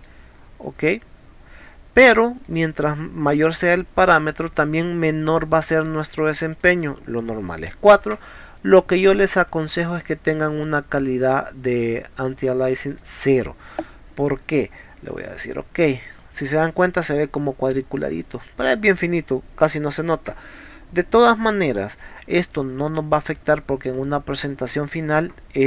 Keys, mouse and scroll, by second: 0.0 click, 2.5 click, 3.7 click, 5.3 click, 6.5 click, 9.2 click, 12.9 click, 15.4 click.